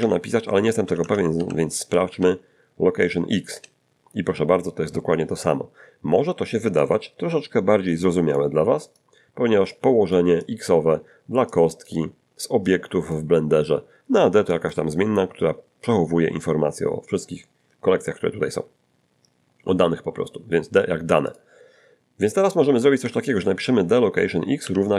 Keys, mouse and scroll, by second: 0.8 BackSpace, 1.0 BackSpace, 1.3 Delete, 1.9 ., 2.1 x, 3.5 Return, 6.8-8.5 drag, 8.9 click, 9.7 click, 10.4 click, 11.5 click, 12.7 click, 14.5 click, 21.3 click, 23.0 Up, 24.6 =.